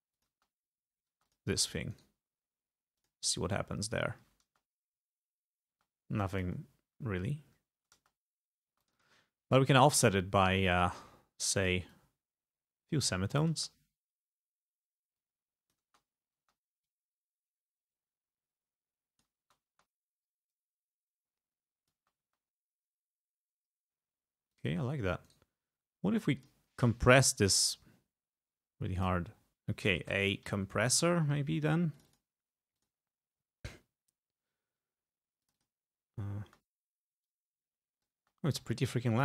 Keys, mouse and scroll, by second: 0.2 click, 0.4 space, 1.2 space, 1.3 click, 2.0 right click, 3.0 click, 4.5 space, 5.8 space, 5.8 click, 8.1 space, 8.8 space, 8.9 click, 10.8-11.9 drag, 11.9-13.3 drag, 13.6 space, 15.2 click, 15.9 space, 17.0-19.4 drag, 19.4 space, 20.7-22.1 drag, 22.1 space, 24.2 space, 24.6 click, 25.3 right click, 26.5 click, 29.0 click, 29.5 click, 29.6-31.2 typing, 32.0 click, 32.8 click, 35.5 click, 36.5 space, 37.3 click, 38.3 space.